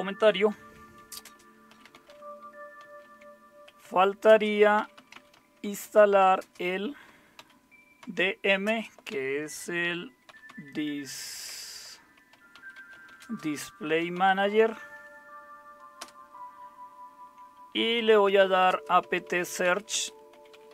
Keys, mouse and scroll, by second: 0.5-16.0 typing, 18.2-20.7 typing.